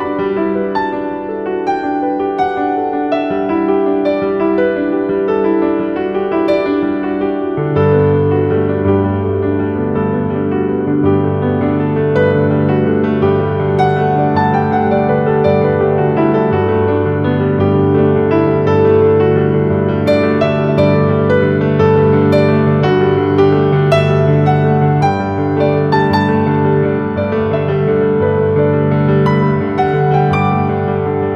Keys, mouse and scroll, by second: 0.9 click, 2.9 ctrl+v, 6.3 click, 16.5 click, 18.9 ctrl+x, 19.6-21.4 scroll up 1, 21.8 click, 22.4-24.1 scroll up 1, 24.5-25.0 typing, 26.1-27.9 typing, 27.7 click, 28.7 click.